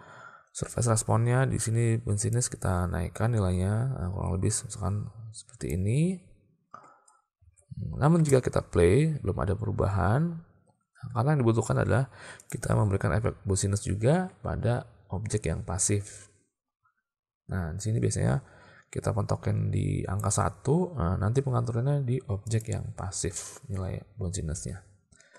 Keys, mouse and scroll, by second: 2.4-6.0 drag, 7.5 alt+a, 8.2 space, 11.0 space, 18.0-20.4 drag, 22.5 click.